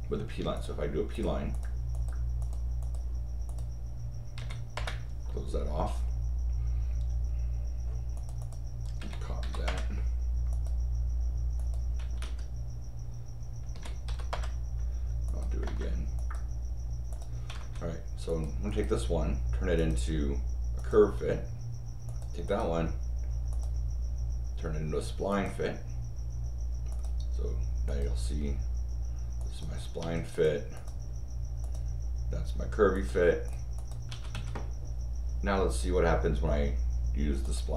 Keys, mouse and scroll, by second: 0.5 click, 1.1 click, 1.5 click, 1.9 click, 2.4 click, 2.8 click, 3.4 click, 4.4 c, 4.7 Return, 8.1 click, 8.4 click, 9.0 c, 9.6 Return, 10.5 click, 11.5 click, 12.2 Escape, 13.7 c, 14.3 Return, 15.2 click, 15.6 Return, 16.1 click, 17.1 click, 17.5 Escape, 18.2 click, 19.7 click, 20.8 click, 22.0 click, 22.4 right click, 23.5 click, 25.3 click, 26.9 click, 27.8 click, 29.4 click, 30.0 Escape, 30.3 click, 30.7 click, 31.6 click, 32.9 click, 33.4 click, 33.7 click, 34.1 Escape, 34.3 Escape, 37.4 click.